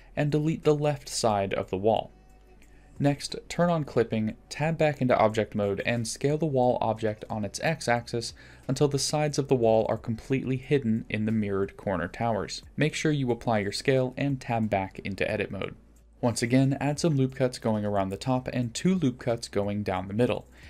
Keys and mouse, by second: 0.4 click, 1.0 x, 2.8 click, 5.5 Tab, 7.6 s, 12.2-13.0 middle drag, 14.6 click, 15.1 ctrl+a, 15.5 Tab, 15.9 ctrl+r, 18.2 ctrl+r, 18.8 middle click, 18.9 3, 19.8 shift+click.